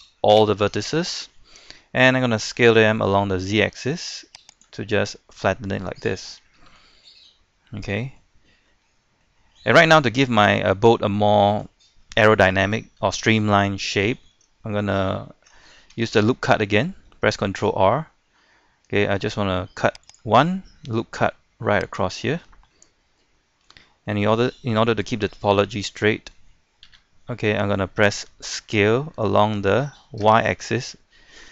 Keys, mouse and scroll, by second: 0.4 a, 0.9 a, 2.5 s, 3.0 z, 4.5 click, 4.8-7.0 middle drag, 7.0-7.7 scroll up 2, 8.6 scroll up 1, 8.7 middle click, 10.0 scroll down 1, 10.2-11.6 middle drag, 11.7 scroll up 1, 11.9 scroll down 1, 12.2-14.6 shift+middle drag, 16.0 ctrl+r, 20.0 click, 22.2-22.7 scroll up 1, 22.7 middle click, 23.3 shift+middle click, 26.8 KP_3, 28.7 s, 30.2 y.